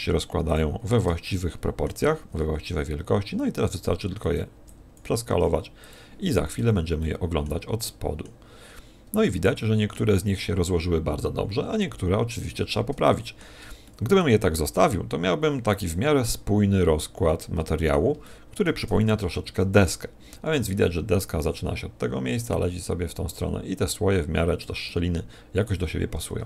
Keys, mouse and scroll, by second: 2.2 click, 2.2 shift+middle click, 2.2 s, 4.7 click, 4.7 g, 5.4 click, 5.4 g, 6.1 click, 6.3 a, 6.6 z, 7.0 middle click, 7.8 middle click, 8.6 scroll up 4, 9.2 middle click, 13.0 shift+middle click, 13.9 middle click, 14.9 middle click, 16.2 middle click, 18.2 shift+middle click, 19.1 n, 19.9 n, 24.9 middle click.